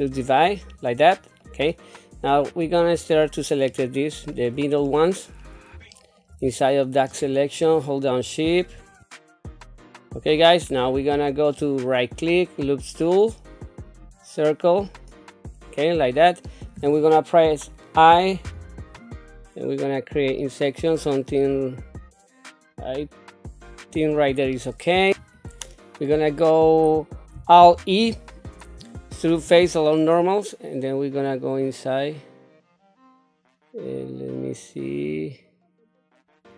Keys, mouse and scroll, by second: 1.4 middle click, 2.5 click, 3.2 shift+click, 3.7 shift+click, 4.2 shift+click, 4.9 middle click, 5.4 scroll down 1, 5.9 shift+middle click, 7.1 shift+click, 7.6 shift+click, 8.1 shift+click, 8.5 shift+click, 9.0 middle click, 9.2 shift+click, 9.8 shift+click, 10.0 middle click, 10.7 scroll up 1, 11.1 shift+middle click, 11.9-14.0 right drag, 15.6 scroll down 1, 18.4 i, 24.5 middle click, 25.1 ctrl+z, 25.1 right click, 27.7 alt+e.